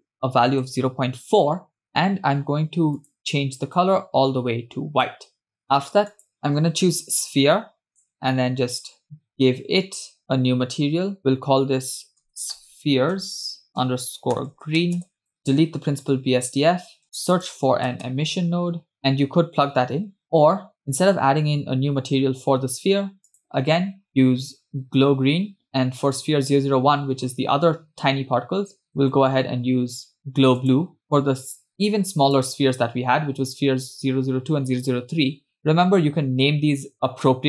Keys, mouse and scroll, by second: 3.2 click, 6.1 click, 10.2-15.2 drag, 13.2 e, 14.7 e, 16.6 click, 16.6 x, 17.0 shift+a, 19.0 BackSpace, 20.8 click, 23.3-25.6 drag, 26.3 click, 29.4-31.0 drag, 32.3 click.